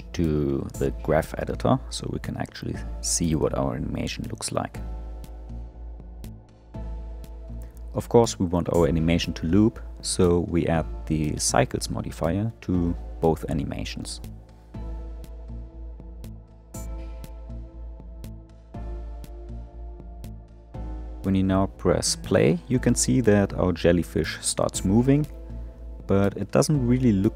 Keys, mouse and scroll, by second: 4.4 click, 6.0 click, 8.4-10.6 drag, 11.6-14.9 drag, 16.1 click, 17.3-20.4 drag, 20.7-21.2 scroll down 3, 21.2-22.3 middle drag, 22.3 space.